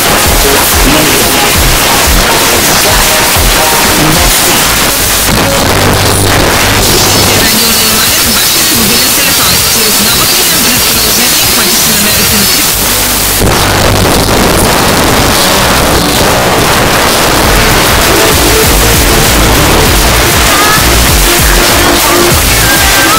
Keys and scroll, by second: 4.6 Page_Down, 12.7 Page_Down, 15.4 Page_Down, 23.1 space.